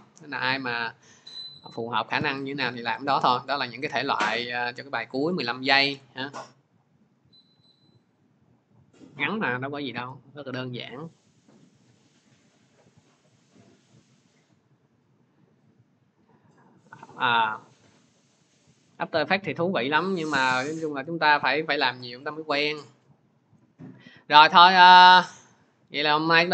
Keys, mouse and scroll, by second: 2.9 click, 4.3 click, 8.0-9.3 drag, 10.7 click, 11.2 click, 11.7 click, 12.4 click, 14.6 click, 15.6 click.